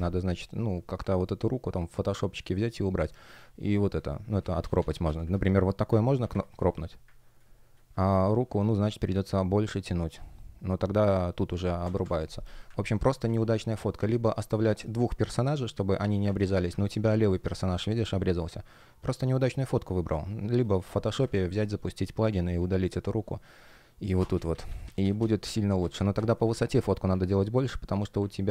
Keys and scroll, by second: 0.1 shift+p, 4.3 super+z, 11.7 Escape, 12.6 super+z, 14.6 shift+p, 16.2 super+z, 21.1 Return, 21.3 shift+p, 24.2 super+z.